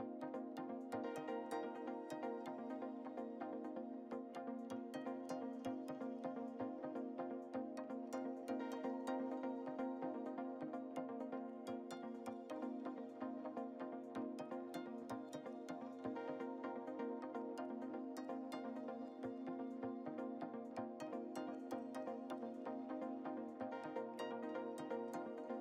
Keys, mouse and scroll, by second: 0.2 click, 2.6 click, 3.8 scroll down 1, 4.2-4.9 shift+middle drag, 4.9 shift+scroll down 1, 5.1-6.1 scroll up 2, 6.1 scroll up 1, 6.1 click, 9.2 click, 9.6-10.3 scroll down 2, 10.3 shift+middle click, 10.3-11.0 scroll down 4, 11.5 scroll down 2, 12.1-13.9 shift+middle drag, 12.1 scroll down 1, 13.4-14.2 scroll up 7, 14.4-16.0 drag, 16.0-16.5 scroll down 5, 16.5-17.0 shift+middle drag, 17.0-17.3 scroll down 1, 17.3 s, 21.4 click, 22.5 scroll up 5, 23.1 scroll up 1, 23.2-23.7 shift+middle drag, 24.7-25.6 drag.